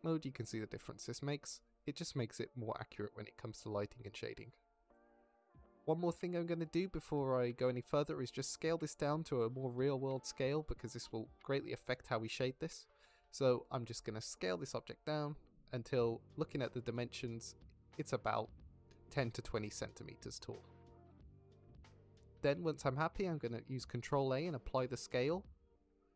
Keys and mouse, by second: 0.3 click, 0.9-1.3 shift+middle drag, 1.5-2.2 middle drag, 2.4-3.9 middle drag, 4.1 middle drag, 4.6 shift+middle drag, 4.9 middle drag, 6.1 middle click, 7.3 shift+middle drag, 8.7 s, 9.0-9.3 drag, 9.3 s, 9.5 click, 10.2 s, 11.7 s, 13.7 click, 15.9 KP_Decimal, 22.1 middle drag, 23.0 middle click, 23.7 ctrl+a.